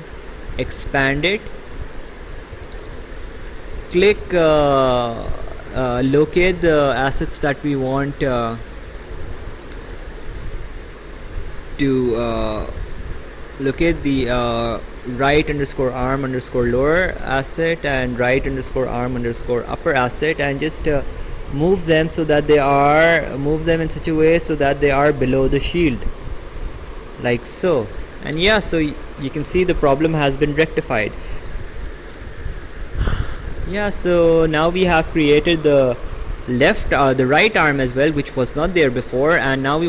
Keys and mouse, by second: 0.5 click, 2.9 click, 7.1 ctrl+click, 10.8 click, 20.4 click, 31.7 right click.